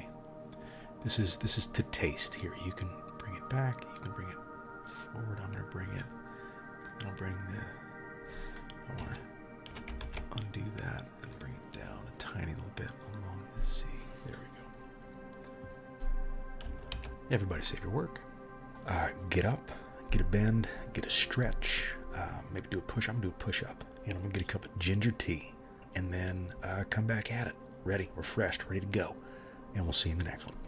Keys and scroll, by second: 9.0 Escape, 10.1 ctrl+z, 16.9 ctrl+s.